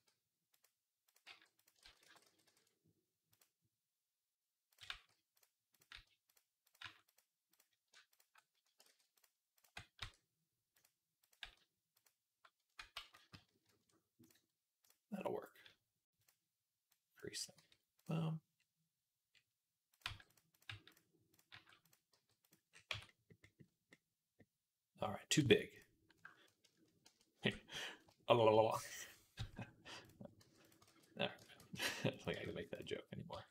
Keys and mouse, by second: 0.9 click, 1.1 g, 1.6 ctrl+z, 1.8 ctrl+z, 4.7 g, 5.6 click, 5.7 g, 6.5 click, 7.9 click, 8.7 ctrl+z, 9.8 e, 11.1 click, 11.2 g, 12.8 ctrl+z, 13.0 ctrl+z, 13.7 middle click, 14.6 click, 14.7-16.0 middle drag, 16.0 click, 16.1 middle click, 16.8-17.9 drag, 17.4 g, 17.9-19.1 middle drag, 19.1 click, 19.2 middle click, 19.8 click, 19.9 g, 20.5 g, 21.2 click, 21.4 g, 22.0 g, 22.7 Tab, 23.2-26.0 middle drag, 25.2 Tab, 26.9 ctrl+KP_Add, 27.8 click, 29.2 s, 30.2 g, 30.6-33.5 ctrl+drag, 30.7 ctrl+z, 31.3 ctrl+z, 31.6 s, 32.1 g, 33.1 r.